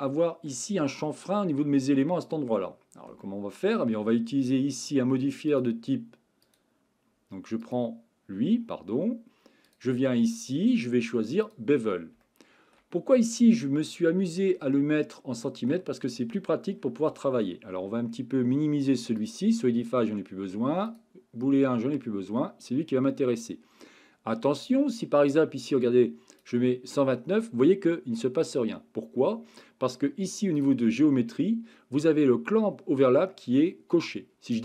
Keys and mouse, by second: 0.0-0.5 shift+middle drag, 3.2-3.7 shift+middle drag, 6.5 click, 9.8-11.5 drag, 12.2-12.7 shift+middle drag, 13.8-14.4 middle drag, 14.7-15.7 shift+middle drag, 19.2 click, 20.9 click, 25.4-26.4 drag, 30.6 click, 34.5 click.